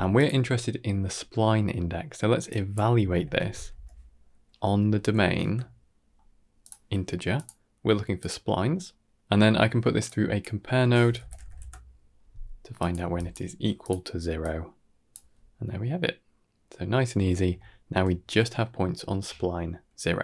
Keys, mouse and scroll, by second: 0.5-1.2 scroll up 4, 1.2 middle click, 2.3-6.5 drag, 7.2-8.1 drag, 8.7-9.1 middle drag, 9.1 click, 9.1 ctrl+right click, 9.9-12.8 drag, 13.0 drag, 13.4 g, 14.3-15.0 drag, 17.4-17.8 shift+middle drag, 19.0 middle drag, 19.3-20.2 scroll down 2.